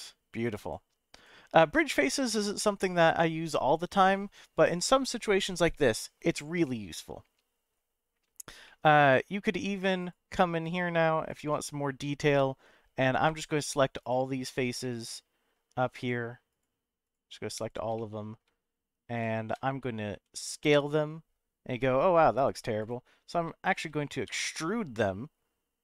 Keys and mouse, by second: 6.6-7.7 middle drag, 8.6 middle click, 10.1 click, 11.3 shift+click, 13.4 shift+click, 14.5 shift+click, 14.8 middle click, 16.5 shift+click, 17.0 shift+click, 17.9 middle click, 20.1 s, 22.8 right click, 24.3 e.